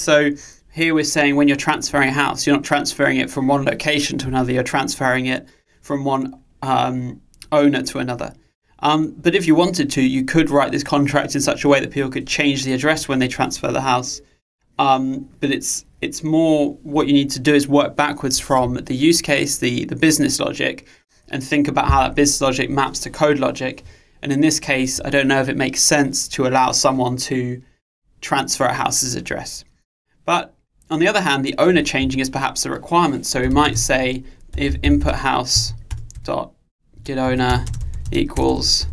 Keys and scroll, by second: 35.9 Return.